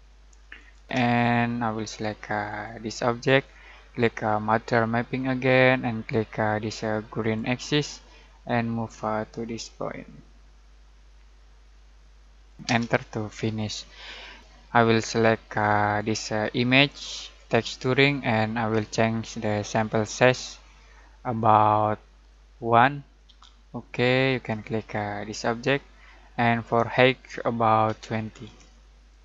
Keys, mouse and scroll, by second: 0.5 click, 0.8 space, 2.4 click, 7.2 click, 12.4 click, 12.6 space, 15.2-16.1 drag, 22.3-23.2 drag, 27.8-28.4 typing, 29.0 click.